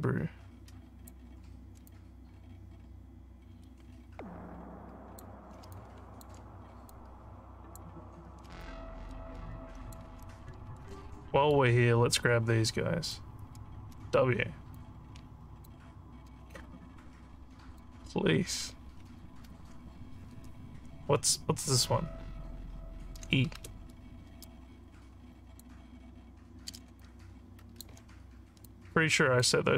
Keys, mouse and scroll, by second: 1.9-5.2 alt+drag, 5.7 alt+click, 6.9 click, 8.6-9.9 alt+drag, 11.1 alt+middle click, 14.8 click, 16.6-17.8 drag, 23.6 e, 24.5-25.7 drag, 27.0 alt+click, 28.6 click.